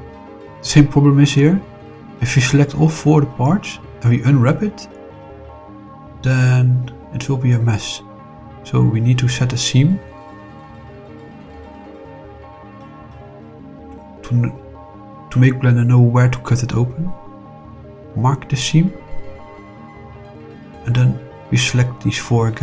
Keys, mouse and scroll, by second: 0.1 shift+click, 0.5 middle click, 1.4 shift+click, 2.0-3.2 middle drag, 3.2-3.7 scroll down 4, 4.0 middle click, 5.5 shift+click, 8.8 middle click, 11.0 middle click, 13.8 click, 14.7 click, 17.6 click, 18.9 click, 20.4 click, 22.2 click.